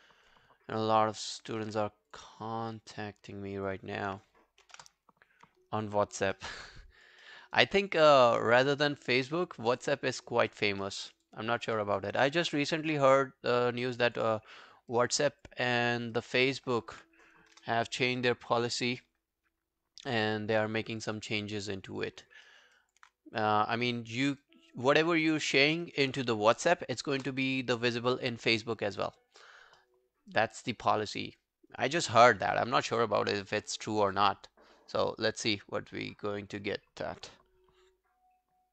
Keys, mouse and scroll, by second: 0.8 alt+click, 1.2 alt+middle click, 1.5 alt+right click, 2.3 double click, 2.5 alt+scroll down 1, 2.8 alt+click, 4.8 ctrl+BackSpace, 5.7 alt+scroll down 1, 5.9 alt+click, 6.4 alt+middle click, 6.6 alt+right click, 6.8 alt+click, 7.3 alt+middle click, 7.5 alt+right click, 7.7 alt+click, 8.2 alt+middle click, 8.5 alt+scroll down 1, 8.7 alt+click, 10.9 alt+middle click, 11.1 alt+right click, 11.3 alt+click, 11.8 alt+middle click, 12.0 alt+right click, 12.9 right click, 14.3 double click, 14.7 scroll down 3, 14.9 alt+click, 15.7 alt+middle click, 15.9 alt+right click, 16.2 alt+click, 17.5 ctrl+BackSpace, 20.2 scroll down 2, 20.6 alt+middle click, 20.9 alt+right click, 21.2 alt+click, 21.6 alt+middle click, 21.9 alt+right click, 22.1 alt+click, 22.5 alt+middle click, 22.8 alt+click, 23.9 double click, 24.2 scroll down 2, 24.4 alt+click, 25.7 alt+middle click, 25.9 alt+right click, 27.2 ctrl+BackSpace, 29.8 alt+middle click, 30.1 alt+scroll down 1, 30.3 alt+click, 31.1 alt+middle click, 31.5 alt+scroll down 1, 31.7 alt+click, 32.3 alt+middle click, 32.6 alt+right click, 32.8 alt+click.